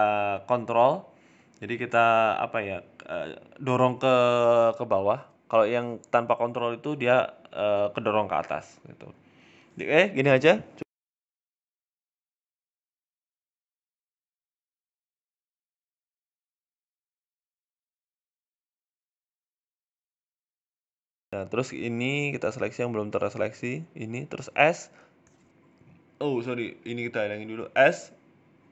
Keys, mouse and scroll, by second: 0.0 ctrl+click, 2.2 click, 2.5 ctrl+click, 2.7 ctrl+click, 3.6 click, 4.6 click, 5.3 click, 5.5 ctrl+click, 5.7 ctrl+click, 6.3 ctrl+click, 6.3 middle click, 6.5-6.9 scroll down 4, 6.8 middle click, 7.1-8.2 scroll up 3, 7.2 shift+middle click, 8.4 shift+a, 9.8 click, 10.8 middle click, 12.0-12.4 scroll down 4, 12.2 middle click, 12.8-13.9 scroll up 5, 13.0 shift+middle click, 13.4 middle click, 13.9 middle click, 14.1 shift+middle click, 14.8 middle click, 15.7 Tab, 16.1 middle click, 17.0 right click, 17.0 scroll up 2, 17.2 alt+shift+right click, 18.0 KP_7, 18.5 shift+middle click, 18.8-19.4 scroll down 4, 19.0 shift+middle click, 19.4 click, 20.9 shift+middle click, 20.9-22.2 scroll up 6, 21.6 shift+right click, 22.2 shift+middle click, 22.8 shift+right click, 23.5 shift+middle click, 24.2 shift+right click, 24.7 s, 27.0 click, 28.4 scroll down 4, 28.4 s, 28.6 Tab.